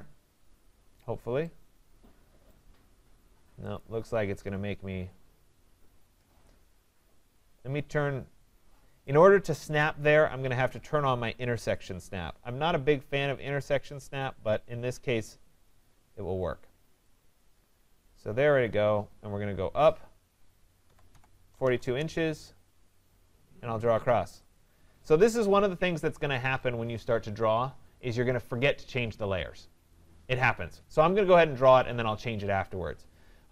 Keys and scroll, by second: 21.8 Return.